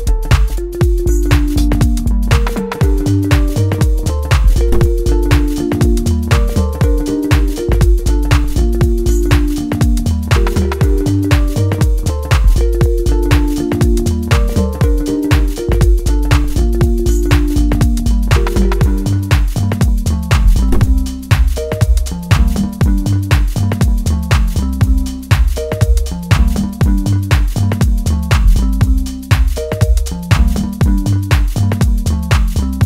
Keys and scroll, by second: 5.2 Right, 15.3 Right, 20.2 Right, 22.3 F3.